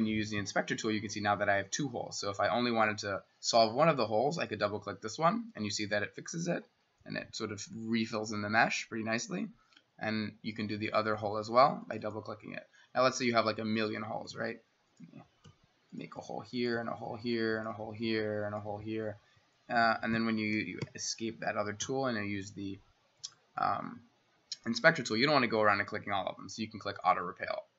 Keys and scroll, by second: 14.3 s, 15.5-18.7 typing, 20.9 Escape, 21.8 i.